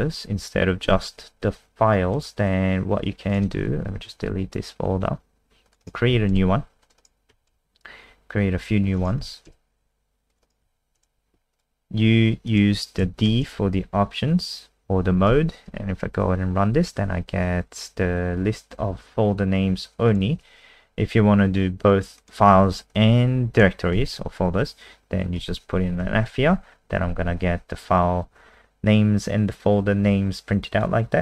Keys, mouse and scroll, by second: 0.8 ctrl+v, 2.1 click, 3.8 Up, 3.9 Down, 4.3 Delete, 5.6 click, 5.8 right click, 6.1 w, 6.3 Return, 6.8 click, 7.0 right click, 7.3 w, 7.5 Return, 8.8 click, 9.0 right click, 9.2 w, 9.5 Return, 10.3 click, 10.4 right click, 10.6 w, 11.0 Return, 11.5 click, 13.2 shift+Right, 15.3 ctrl+s, 15.7 F5, 20.1 click, 20.7 Escape, 22.2 click, 23.0 Left, 23.9 f, 25.4 ctrl+s, 26.0 F5.